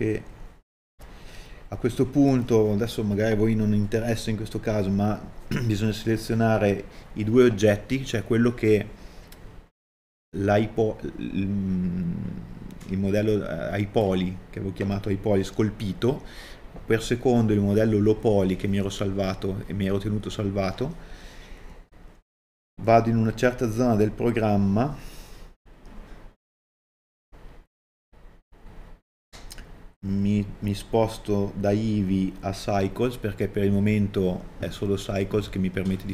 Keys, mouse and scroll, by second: 22.1 KP_Divide, 23.2-23.5 scroll down 1, 24.1 middle click.